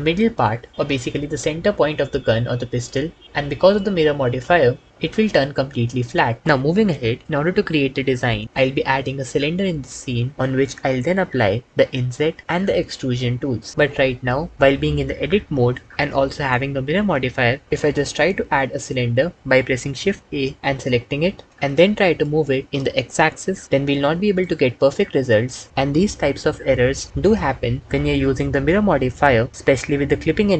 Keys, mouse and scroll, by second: 18.5 shift+a, 22.6 g, 22.6 x.